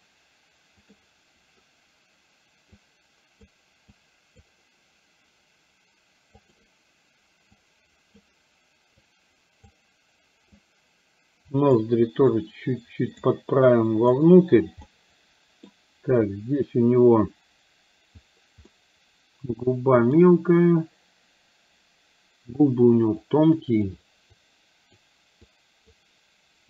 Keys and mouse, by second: 2.8 click, 4.1 click, 6.6 click, 7.7 click, 9.1 click, 10.6-11.8 drag, 12.4 click, 13.8 click, 14.9 middle click, 18.7-20.3 middle drag, 23.3 click, 24.4 click, 25.6 click.